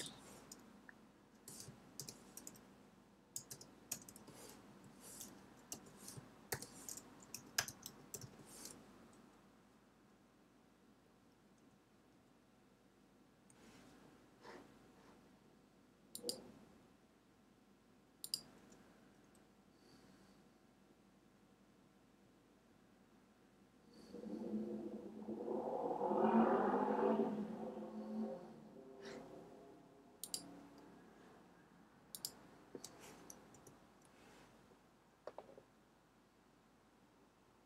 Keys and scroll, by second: 1.9 shift+', 3.1-4.4 typing, 4.6 Right, 5.6-8.6 typing, 33.5 Return.